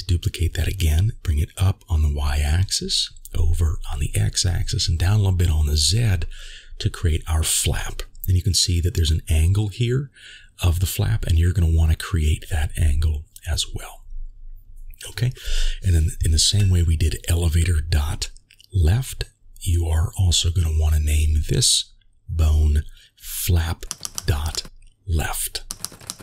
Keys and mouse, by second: 2.7 g, 5.6 g, 10.9 g, 18.6 middle click, 20.7 g, 23.4-26.2 shift+drag, 23.4 BackSpace.